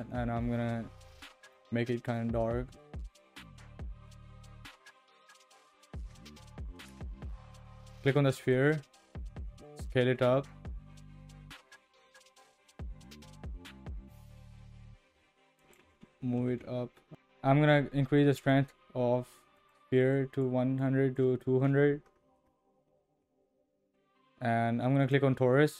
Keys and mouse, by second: 8.4 click, 9.5 s, 16.2 g, 18.4-22.3 drag.